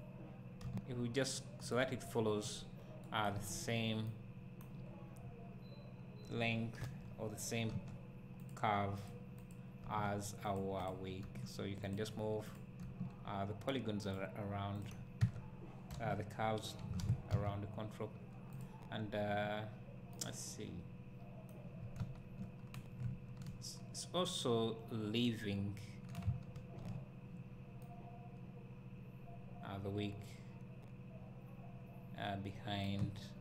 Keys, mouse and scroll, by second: 0.7 g, 1.7 click, 3.4 Tab, 4.1-8.5 right drag, 4.9 scroll down 2, 6.8 KP_3, 7.8 Tab, 8.5 click, 9.8 g, 10.9 click, 11.3 g, 12.5 click, 12.9 g, 14.1 click, 15.2 Tab, 15.9 KP_1, 17.5 z, 18.6 click, 19.1-19.4 scroll up 1, 20.2-33.4 right drag, 21.9 scroll down 1, 22.0 `, 22.6 scroll up 1, 23.1 `.